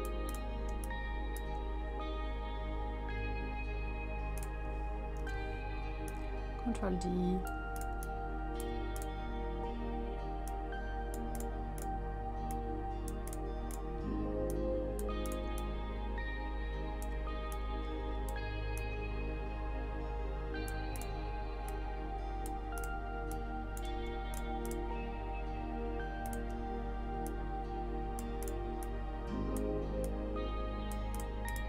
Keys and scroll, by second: 0.7 space, 5.2 ctrl+d.